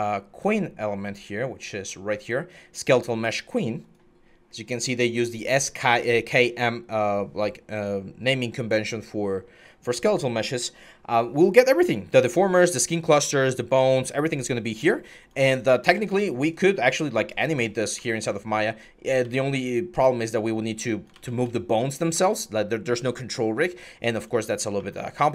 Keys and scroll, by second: 17.7 e, 19.0 ctrl+z, 20.9 ctrl+z, 24.3 4.